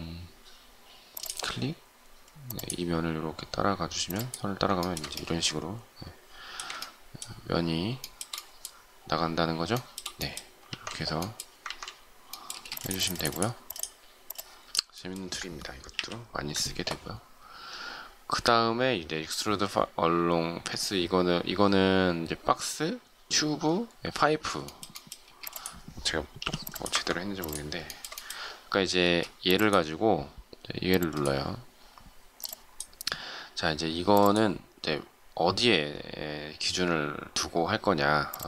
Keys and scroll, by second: 10.6 ctrl+shift+z, 11.6 ctrl+z, 12.5 space, 15.9 Delete, 25.2 shift+space, 26.4 m, 29.0 space.